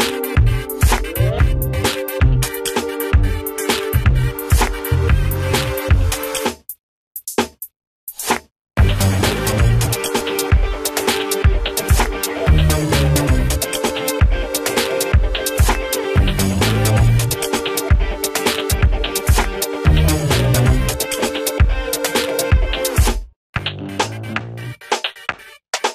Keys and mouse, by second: 1.1 Up, 3.9 Up, 4.1-7.3 drag, 7.3-8.9 drag, 8.9 shift+right click, 10.8-12.7 drag, 12.7 shift+right click, 20.5 ctrl+space, 21.5-22.7 drag.